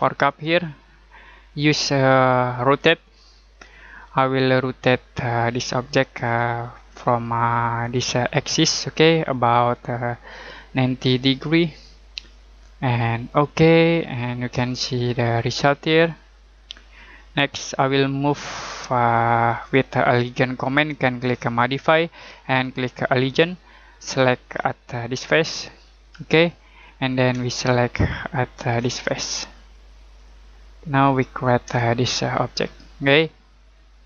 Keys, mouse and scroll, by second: 0.2 click, 7.8 click, 11.0 typing, 13.3 click, 14.0 middle click, 14.7 shift+middle click, 21.5 click, 24.1-24.5 scroll up 1, 24.5-26.0 scroll down 1, 26.0 click, 26.5 scroll down 1, 26.7-27.3 scroll up 1, 27.4 middle click, 29.1 scroll down 1, 30.1 click, 30.8 scroll down 1, 31.0-31.6 scroll up 1, 31.8 shift+middle click.